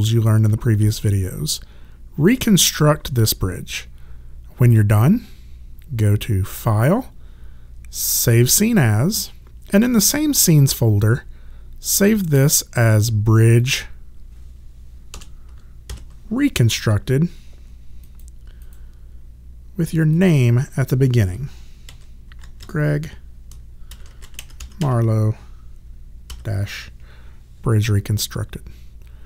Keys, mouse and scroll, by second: 6.5 click, 13.6 click, 15.1 BackSpace, 15.9 shift+r, 18.0 click, 21.6-26.3 typing.